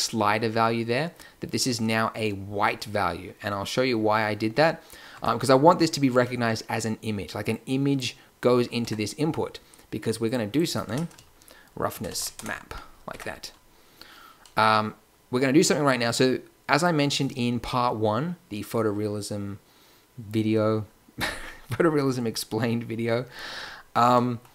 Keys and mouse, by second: 2.5 Tab, 5.0 Tab, 8.8 Tab, 12.6 n, 13.1 Tab.